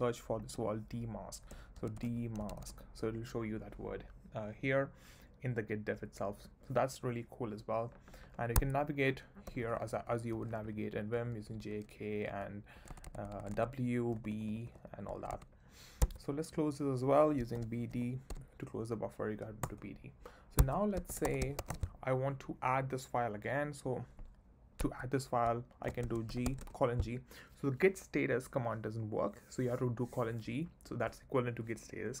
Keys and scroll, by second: 1.3-3.1 typing, 8.5 Escape, 9.4 j, 10.3 k, 11.2 j, 12.3 k, 12.9 w, 14.2 b, 15.1 w, 16.0 Escape, 17.3-18.8 typing, 19.6 Return, 20.6 Escape, 20.8-22.1 typing, 24.8 Escape, 25.9 shift+;, 26.3 g, 26.6 space.